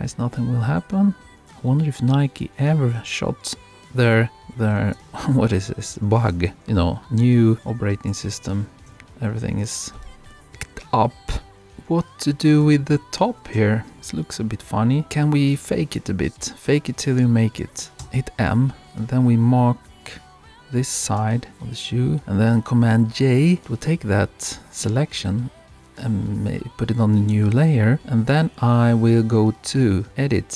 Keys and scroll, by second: 5.0 super+-, 7.6 super+-.